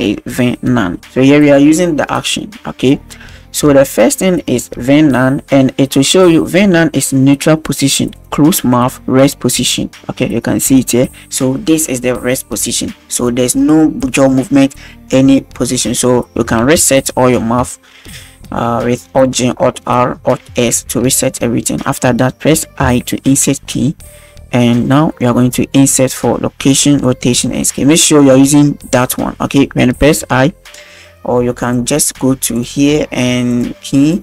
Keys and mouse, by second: 3.9 shift+click, 16.6 alt+g, 16.8 alt+r, 17.4 alt+s, 22.9 i, 32.6 click, 32.6 i, 34.1 click.